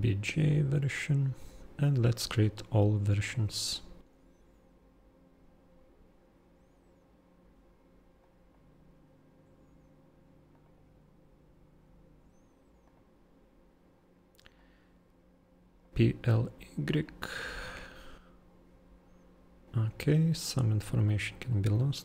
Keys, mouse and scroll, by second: 0.4 super+click, 3.2 super+click, 8.2 super+click, 21.5 super+click.